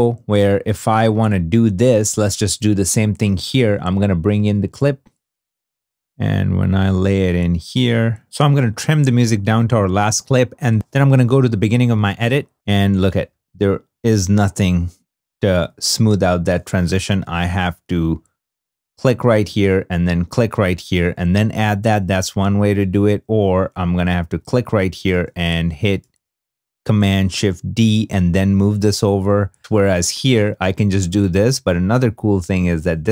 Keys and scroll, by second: 10.3 e, 11.1 =, 12.0 -, 13.0 =, 15.2 -, 21.4 super+z, 24.8 super+d, 25.7 shift+super+d, 25.9 shift+super+d, 28.5 super+z.